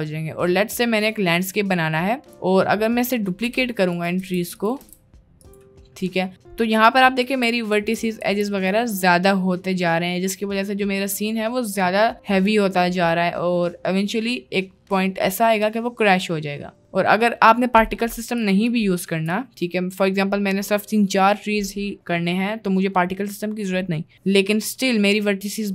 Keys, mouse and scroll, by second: 0.4 middle click, 1.0 middle click, 1.7-2.3 middle drag, 3.6 shift+d, 4.3 shift+d, 4.9 shift+d, 6.2 middle click, 10.3 ctrl+z, 10.4 middle click, 16.8 middle click, 17.4 middle click, 18.5 middle click, 18.7 middle click, 19.6 middle click.